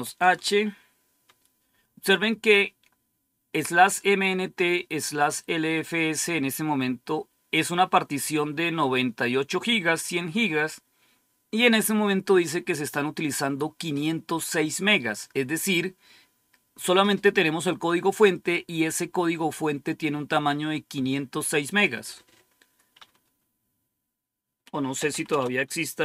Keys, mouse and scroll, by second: 0.0-0.2 typing, 12.2-13.9 drag, 21.6 click, 24.6-26.0 typing.